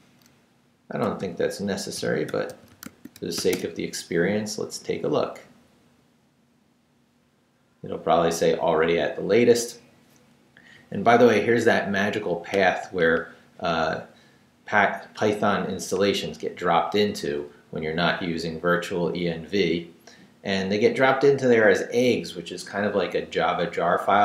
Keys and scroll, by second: 1.0-3.9 typing.